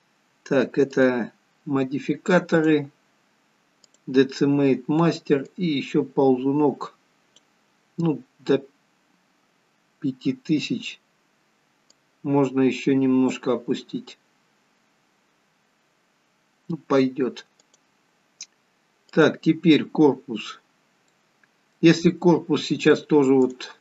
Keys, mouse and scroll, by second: 1.3 click, 2.6 click, 5.3 click, 11.8 click, 17.7 click, 19.0 click, 20.6-21.2 scroll down 2, 21.0 middle click, 22.0 scroll up 2, 23.5 click.